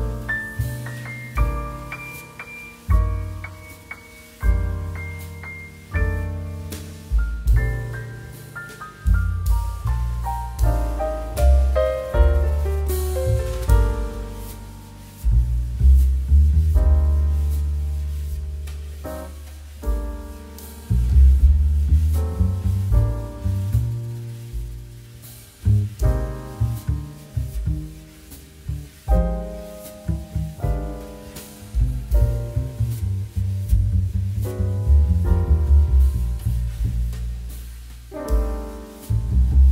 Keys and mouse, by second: 0.3 click, 0.6 middle click, 4.9 Tab, 5.2 middle click, 5.8 shift+middle click, 6.0 shift+a, 7.3 click, 8.1 right click, 8.5 click, 8.8 g, 9.1 z, 9.5 click, 9.6 middle click, 10.1 shift+middle click, 10.3 middle click, 10.8 middle click, 11.3 s, 11.9 click, 12.0 middle click, 12.3 g, 12.7 click, 12.8 middle click, 13.1 shift+middle click, 13.3 middle click, 13.7 click, 14.4 shift+a, 15.3 click, 15.5 middle click, 15.8 s, 16.9 click, 17.0 g, 17.6 click, 17.8 middle click, 18.2 s, 18.9 click, 19.1 g, 19.6 click, 19.8 middle click, 20.0 s, 21.3 click, 21.4 middle click, 22.0 click, 22.2 middle click, 23.0 click, 23.3 s, 23.6 shift+z, 24.1 click, 24.2 middle click, 24.5 click, 24.7 middle click, 25.1 shift+middle click, 27.9 click, 28.2 Tab, 29.1 click, 29.4 z, 29.8 middle click, 30.4 shift+middle click, 30.7 g, 31.3 click, 31.6 Tab, 31.7 click, 31.9 middle click, 32.1 shift+middle click, 34.4 click, 34.7 middle click, 34.9 shift+middle click, 35.2 middle click, 35.6 shift+a, 36.6 click, 37.6 click.